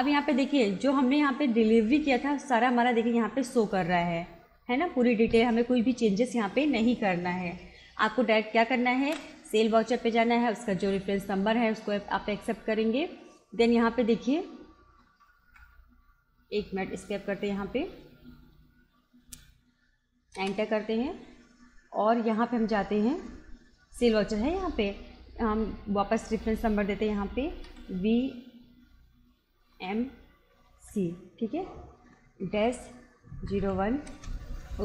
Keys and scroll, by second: 3.9 Return, 9.2 space, 15.0 BackSpace, 17.0 Escape, 20.4 Return, 27.7 shift+v, 29.8 shift+m, 30.8 shift+c, 32.7 -, 33.4 0, 33.6 1, 34.1 Return.